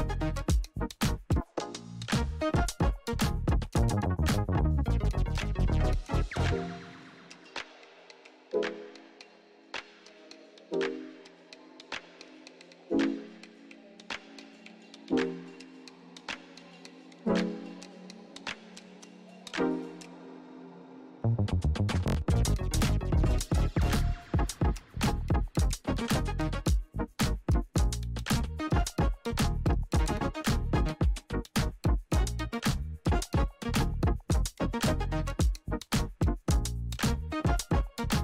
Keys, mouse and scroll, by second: 0.1 p, 1.1 click, 2.5 Return, 4.0 click, 4.8 space, 7.9 space, 8.8 k, 9.4 click, 10.2-10.7 typing, 11.6 click, 14.3 ctrl+a, 14.6-16.0 typing, 16.9 click, 19.4 click, 23.8 Return, 24.6 click, 25.7 Return, 27.7 click, 29.1 Return, 29.9 click, 33.0 click, 33.8 ctrl+c, 34.8 click, 35.0 click, 35.4 ctrl+v, 36.3 click.